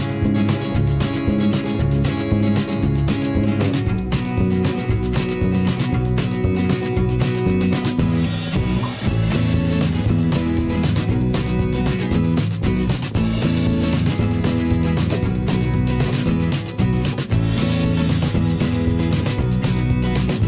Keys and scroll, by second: 1.0 ctrl+z, 3.1 ctrl+z, 3.4 ctrl+z, 4.3 ctrl+z, 8.0 ctrl+z, 13.5 ctrl+z, 15.0 v, 15.9 i, 16.5 v, 17.1 ctrl+z, 18.7 /, 19.6 [, 19.7 p.